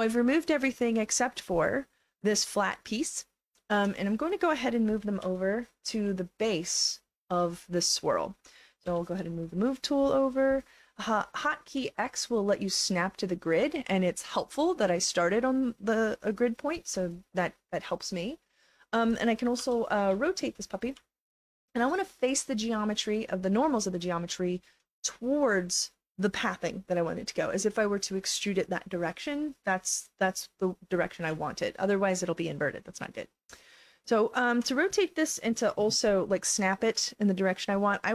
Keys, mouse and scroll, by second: 1.9 click, 2.0 click, 2.5 alt+click, 5.2 e, 6.1 alt+click, 8.8 w, 11.7 x, 12.2-13.5 drag, 17.1 alt+click, 17.7 alt+right click, 18.3 alt+middle click, 19.6 r, 20.1 e, 21.0-23.0 alt+drag, 23.4 alt+click, 23.7 alt+right click, 24.1 alt+click, 31.4-33.4 alt+drag, 33.9 alt+click.